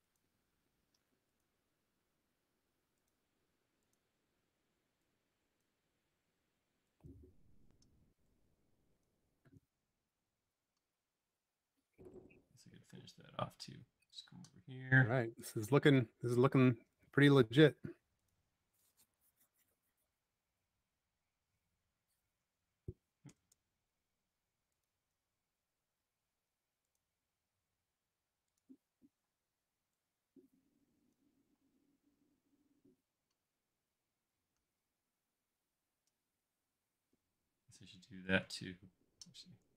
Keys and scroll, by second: 4.2 e, 7.6 p, 9.5 space, 10.6 typing, 13.0 l, 21.6 Caps_Lock, 27.5 e, 29.2 p, 31.3-32.0 typing.